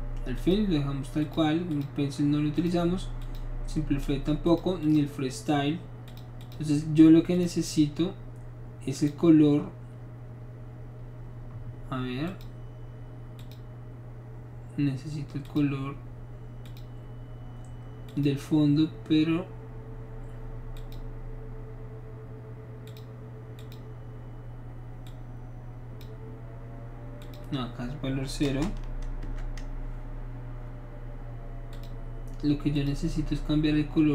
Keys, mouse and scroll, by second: 0.4 click, 1.2 click, 1.7 click, 2.6 click, 3.2 click, 4.5 click, 4.8 click, 6.0 click, 6.4 click, 7.3 click, 9.0 click, 12.3 click, 13.4 click, 15.4 click, 16.6 click, 18.1 click, 20.8 click, 22.9 click, 23.6 click, 25.1 click, 27.2 click, 28.5 KP_0, 29.2 Return, 31.7 click, 32.7 click.